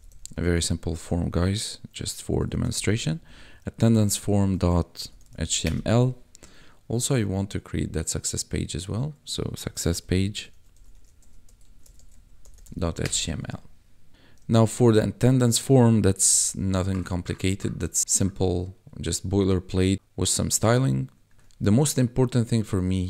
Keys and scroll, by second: 0.0-0.7 typing, 2.3-3.2 typing, 5.0 h, 5.2 t, 5.3 l, 5.6 Return, 9.6 s, 10.8-12.7 typing, 13.0 Return, 14.4 ctrl+v, 16.2 ctrl+b.